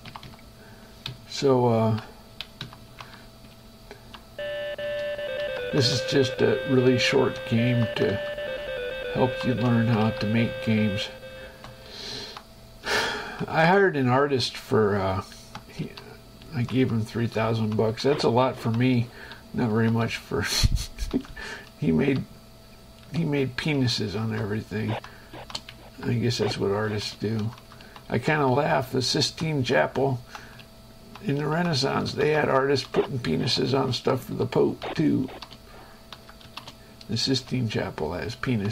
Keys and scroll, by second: 0.3 Page_Down, 1.3 Up, 2.9 Down, 3.2 Right, 3.4 Up, 3.8 Left, 5.0 space, 5.7 Up, 6.0 Right, 6.2 Down, 8.0 Right, 8.5 Down, 9.2 Up, 9.7 Right, 9.9 Up, 11.7 shift+Escape, 12.4 Right, 13.2 Left, 13.5 Right, 14.5 space, 15.2 Right, 16.0 Left, 16.7 Right, 17.0 Down, 17.8 Right, 18.3 Down, 18.8 Right, 19.3 Left, 19.9 Right, 20.3 Down, 21.9 Left, 24.0 Down, 25.9 Up, 27.0 space, 27.7 Down, 28.0 Right, 32.2 Left, 32.4 Down, 34.0 Left, 34.2 Up, 34.5 Left, 35.0 Down, 35.4 space, 36.4 Down, 36.7 space, 37.7 shift+Escape, 38.5 Right.